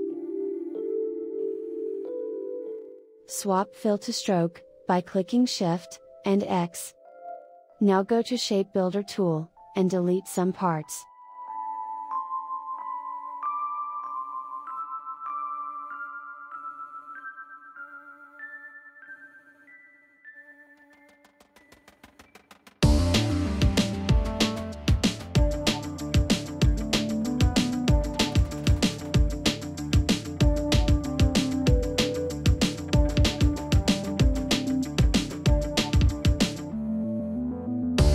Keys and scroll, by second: 4.5 shift+x.